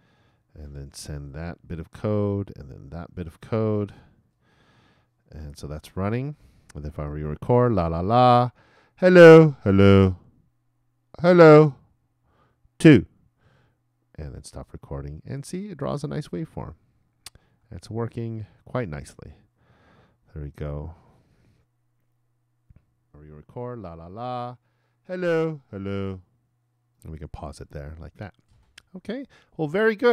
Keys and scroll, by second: 1.1 super+Return, 3.7 super+Return.